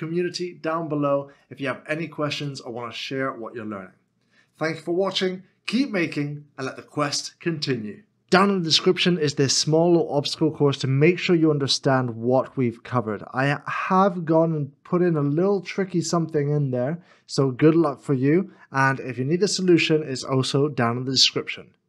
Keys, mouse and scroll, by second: 9.2 middle click, 10.7 shift+middle click, 11.6 middle click.